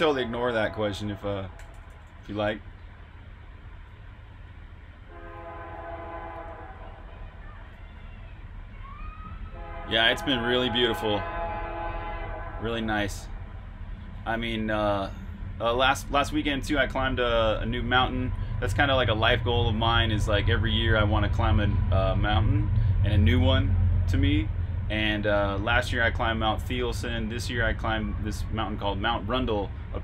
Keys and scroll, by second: 1.1-3.1 typing.